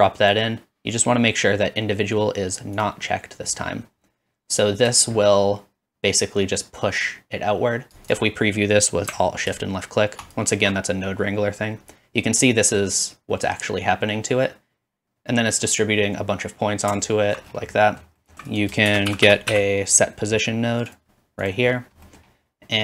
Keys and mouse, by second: 5.1-8.1 shift+middle drag, 8.1 shift+click, 8.2-10.2 middle drag, 10.4 alt+shift+middle click, 15.0-18.5 drag, 19.0-21.2 middle drag, 19.0 shift+a, 19.4 s, 21.2 click, 21.4 middle click.